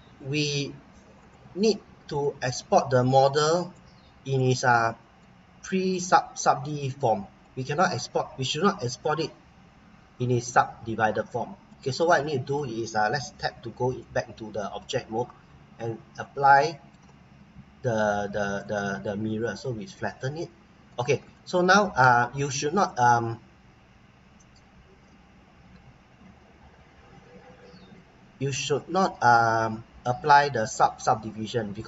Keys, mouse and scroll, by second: 4.4 middle click, 5.5-5.9 scroll up 1, 6.4 middle click, 7.7-8.0 scroll down 1, 8.0-10.4 scroll up 1, 11.3 scroll down 1, 11.6 middle click, 13.5 Tab, 14.0 middle click, 15.6-16.2 scroll up 1, 16.2 scroll down 1, 16.6 middle click, 18.6 click, 19.6 middle click, 20.4-20.7 scroll up 1, 20.8 middle click, 27.9 click, 31.2 scroll up 1, 31.6-31.8 scroll down 1.